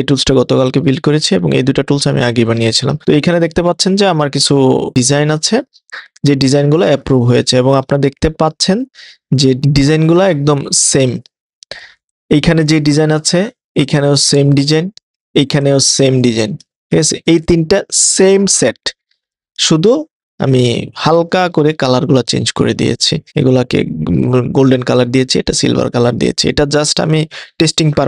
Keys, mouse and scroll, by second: 9.6 super+z, 9.6 click.